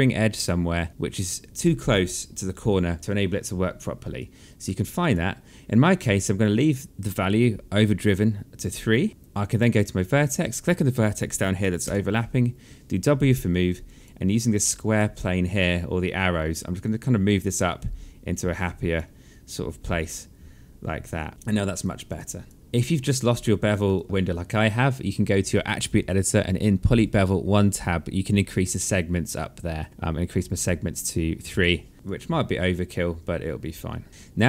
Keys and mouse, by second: 3.9 alt+click, 8.9 right click, 10.1 click, 11.6 w, 13.5 alt+click, 14.3 alt+click, 15.8 click, 19.7 alt+click, 21.5 alt+click, 23.7 alt+click, 29.1 click, 31.9 alt+click, 34.1 alt+click.